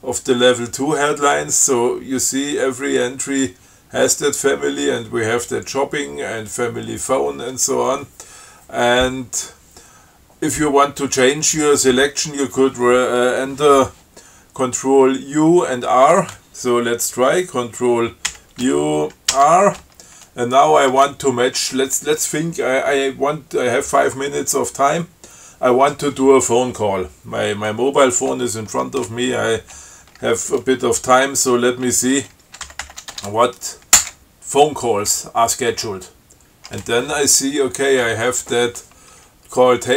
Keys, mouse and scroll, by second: 18.6 ctrl+u, 19.6 r, 32.7-33.6 typing, 34.2 Return.